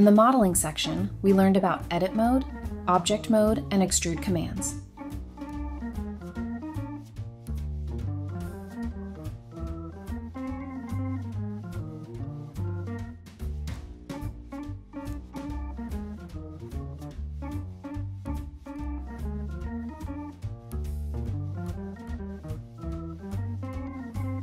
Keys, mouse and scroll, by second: 0.0-0.4 typing, 1.4 Tab, 1.5-2.1 scroll down 2, 1.6 middle click, 2.1 middle click, 3.2-4.3 typing, 4.8 scroll down 1, 5.8 scroll up 1, 6.5-7.2 typing, 7.3 Return, 7.8 middle click, 8.3-8.7 scroll up 1, 8.7 typing, 9.8-10.8 typing, 14.3-14.6 scroll up 1, 15.2 typing, 16.3 Tab, 16.6-17.4 typing, 18.3 Tab, 18.6-19.3 typing, 20.2 Tab, 20.5-24.4 typing, 20.6 Tab, 21.6 double click, 21.8 scroll up 1, 22.2 Escape.